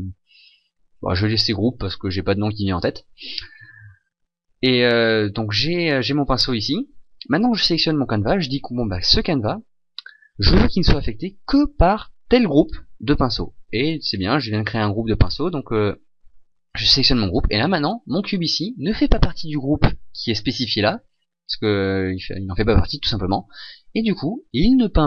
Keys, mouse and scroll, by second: 7.6 right click.